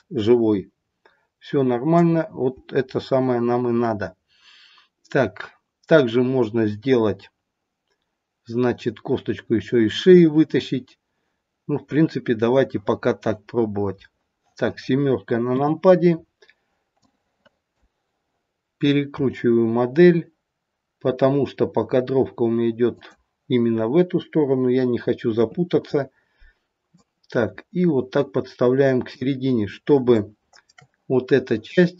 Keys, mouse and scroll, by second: 11.7-12.3 scroll down 1, 15.5 KP_7, 16.0-17.0 scroll down 3, 17.0 click, 17.0-17.8 scroll down 3, 19.3 r, 25.3 KP_3, 26.9 click, 29.5-30.2 scroll up 4, 30.2 shift+middle click, 30.6 shift+middle click.